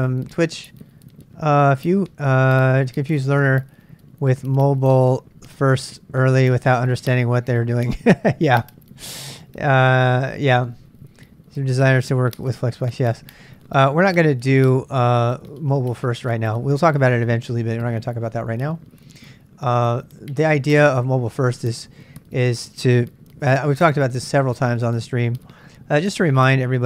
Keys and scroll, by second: 24.4 super+Tab, 25.2 super+Tab.